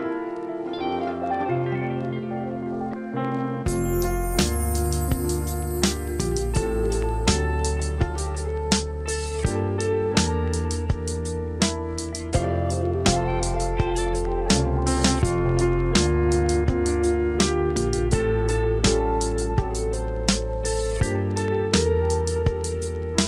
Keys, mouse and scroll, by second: 4.8 click, 9.6 click, 15.1 click, 17.4 click.